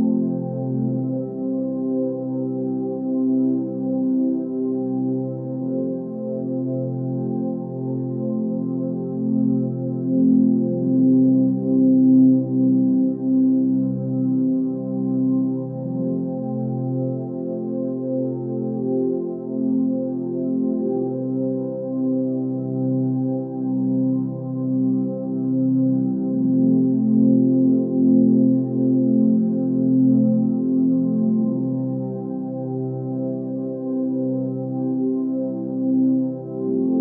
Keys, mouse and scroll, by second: 14.6 ctrl+space, 16.0 click, 16.6 click, 17.2 ctrl+space, 19.3 ctrl+space, 25.1 ctrl+space, 27.5 ctrl+z, 28.0 ctrl+space.